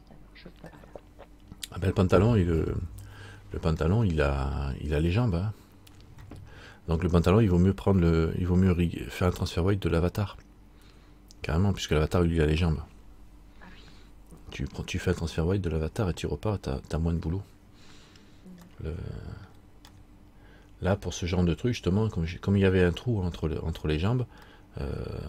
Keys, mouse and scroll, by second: 4.0 middle click, 19.1 middle click, 20.1 middle click, 24.7 middle click.